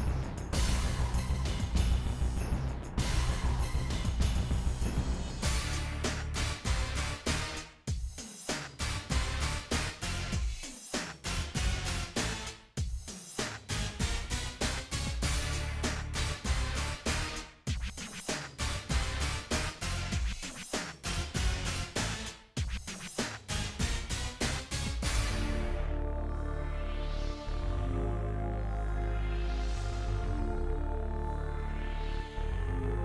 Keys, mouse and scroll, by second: 0.4 g, 1.8 scroll down 8, 2.1 middle click, 2.5 ctrl+z, 2.6 click, 2.6 scroll up 11, 2.9 click, 3.1 click, 3.6 g, 4.1 scroll up 3, 4.2 shift+middle click, 4.6 click, 5.3 scroll up 2, 5.4 shift+middle click, 5.7 shift+middle click, 5.9 g, 6.3-7.0 scroll up 9, 6.6 shift+middle click, 7.0 click, 7.2 g, 7.8 scroll up 12, 8.0 shift+middle click, 8.4 g, 8.6 scroll down 15, 8.9 shift+middle click, 9.1 click, 9.3 scroll up 7, 10.0 g, 10.3-11.0 scroll down 23, 11.0 scroll up 7, 11.1 shift+middle click, 11.5 shift+middle click, 11.6 click, 12.1 g, 12.4 click, 12.9 g, 13.1 scroll down 6, 13.2 middle click, 14.2 shift+middle click, 14.7-15.1 ctrl+z, 15.2 middle click, 16.1 KP_1, 16.9 click, 17.1-17.9 scroll up 9, 17.2 shift+middle click, 17.5 shift+middle click, 17.9 click, 18.2 g, 18.9 shift+middle click, 19.2 g, 20.3 shift+middle click, 20.7 click, 21.0 g, 21.3-21.9 scroll down 20, 21.5 shift+middle click, 21.9 shift+middle click, 22.0 shift+scroll up 12, 22.2 shift+middle click, 22.3 click, 22.6 g, 23.3-23.7 scroll up 9, 23.5 shift+middle click, 23.7 shift+middle click, 23.9 g, 25.2 scroll up 12, 25.5 g, 26.0-26.3 scroll down 28, 26.3 shift+middle click, 26.6-27.2 scroll up 13, 26.9 Left, 27.2 g, 27.6-28.1 scroll down 24, 28.1 click, 28.4 g, 29.2 shift+middle click, 30.0 shift+click, 30.4 g, 31.2-31.7 scroll down 9, 31.7 click, 32.2 shift+middle click, 32.5-33.0 scroll up 3, 32.6 shift+middle click, 32.8 shift+middle click.